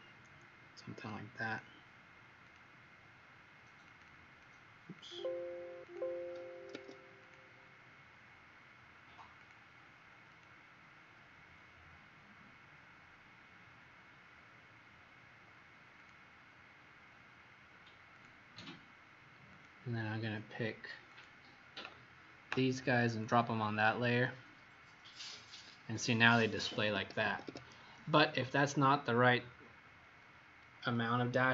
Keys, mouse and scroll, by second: 4.0 click, 4.9 click, 6.7 Escape, 7.2 click, 9.3 click, 26.9 Escape, 27.2 Escape, 27.4 Escape, 28.4 scroll up 1.